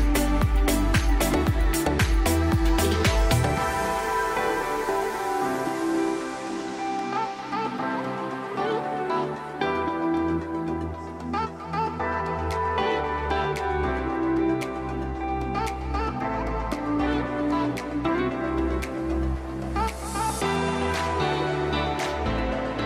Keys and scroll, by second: 1.0 F3, 3.8 space, 4.4 c, 4.9 Escape, 4.9 F2, 6.4 ctrl+q, 9.5 F3, 10.6 space, 15.8 Escape, 18.7 Delete.